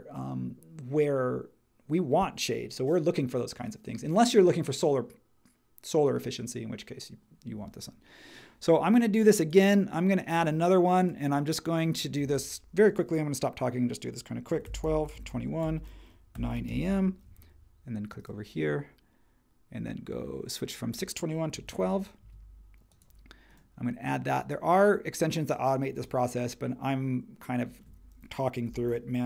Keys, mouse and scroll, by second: 14.2-17.1 typing, 21.2-22.0 typing, 22.2 Tab, 28.6-29.2 typing.